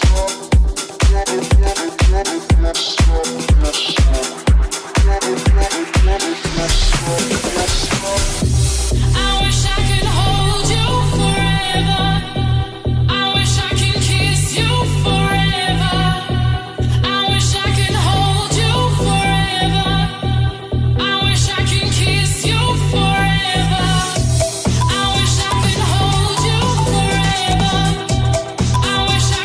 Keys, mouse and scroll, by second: 1.4 right click, 1.8 Tab, 6.7-8.8 middle drag, 8.8 right click, 8.8-16.3 middle drag, 16.3 alt+right click, 16.4-22.6 alt+middle drag, 19.7 alt+z, 22.6 alt+shift+click, 22.6-26.6 alt+shift+middle drag, 22.9 alt+z, 25.8 alt+z, 26.6 shift+click, 26.6 shift+middle click, 27.0 right click, 27.0-29.4 middle drag, 27.8 alt+z, 29.1 alt+z.